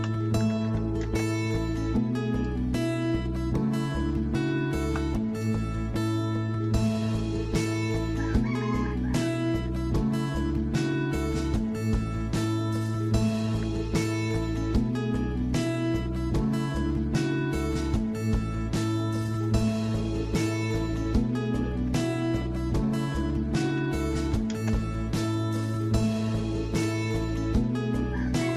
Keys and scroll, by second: 1.8-2.5 typing, 13.6 alt+Tab, 21.7 alt+Tab, 23.7-24.9 typing, 26.6-28.5 typing.